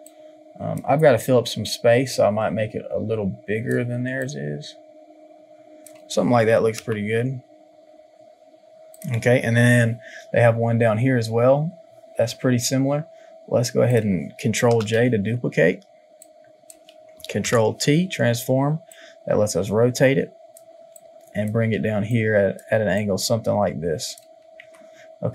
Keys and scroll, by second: 6.8 Return, 14.6 ctrl+j, 24.6 Return.